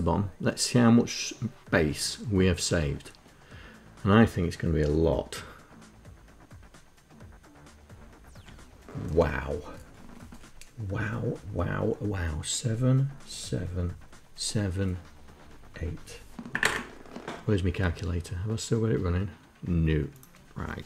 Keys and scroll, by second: 20.5-20.8 typing.